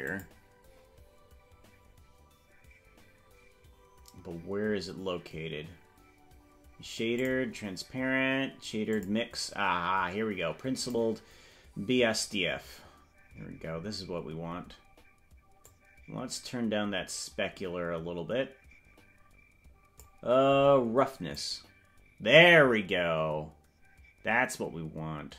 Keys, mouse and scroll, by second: 0.1 click, 7.2 click, 8.9 click, 10.8 click, 13.4 scroll down 2, 13.6 scroll up 1, 13.8-14.8 scroll down 12, 15.6-20.2 drag, 21.3-25.3 drag.